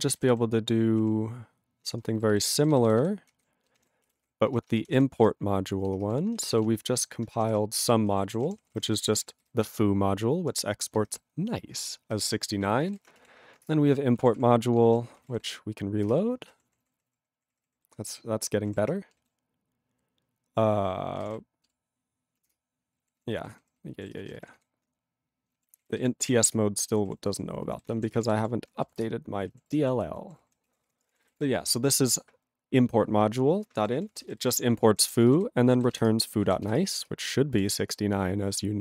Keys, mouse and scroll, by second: 6.2 ctrl+s, 8.1 ctrl+=, 8.5 ctrl+p, 8.6 ctrl+p, 8.7 ctrl+p, 8.8 ctrl+space, 8.9 ctrl+e, 8.9 ctrl+n, 9.0 ctrl+e, 9.2 ctrl+n, 9.2 ctrl+e, 9.4 ctrl+g, 10.4 ctrl+p, 11.1 ctrl+alt+f, 11.8 ctrl+alt+f, 14.2 ctrl+a, 14.2 ctrl+p, 14.4 ctrl+p, 16.2 ctrl+Return, 16.6 ctrl+=, 18.7 ctrl+=, 22.7 ctrl+Return, 23.0 ctrl+=, 24.2 ctrl+space, 24.2 ctrl+e, 24.3 ctrl+n, 24.4 ctrl+n, 24.4 ctrl+e, 24.6 ctrl+g, 26.6 ctrl+Return, 27.0 ctrl+=, 27.5 ctrl+=, 29.1 ctrl+Return, 29.6 ctrl+=, 30.7 ctrl+a, 30.7 ctrl+p, 30.9 ctrl+p, 30.9 ctrl+space, 31.0 ctrl+n, 31.3 ctrl+n, 31.3 ctrl+e, 31.3 ctrl+g, 33.9 ctrl+p, 34.1 ctrl+p, 34.2 ctrl+space, 34.2 ctrl+e, 34.3 ctrl+n, 34.4 ctrl+n, 34.7 ctrl+g, 34.9 ctrl+p, 35.2 ctrl+space, 35.3 ctrl+e, 35.3 ctrl+g, 36.1 Return, 36.8 Return.